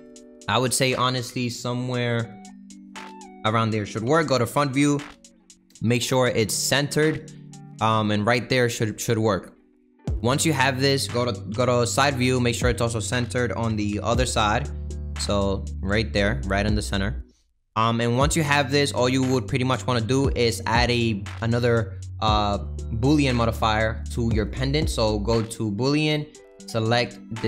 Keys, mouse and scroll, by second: 0.2 middle click, 0.5-1.0 scroll down 1, 1.0 click, 2.3 s, 4.0 KP_1, 5.3 g, 9.0 click, 9.3-11.5 middle drag, 11.5 KP_3, 12.6 click, 13.7 g, 17.5 click, 17.8-19.7 middle drag, 19.7 click, 25.8-26.9 drag.